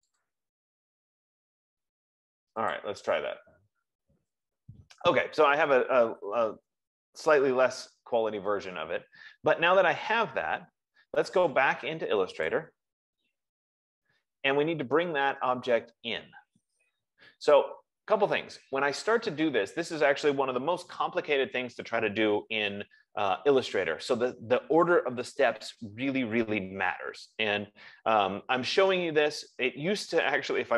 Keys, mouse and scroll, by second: 0.0 click, 0.7 click, 3.2 click, 13.2 click, 21.3 F15.